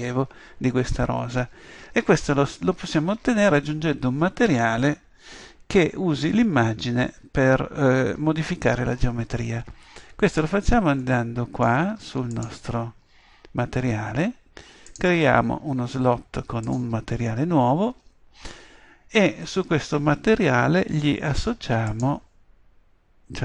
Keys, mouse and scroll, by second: 12.3-18.5 drag, 21.9-23.4 drag.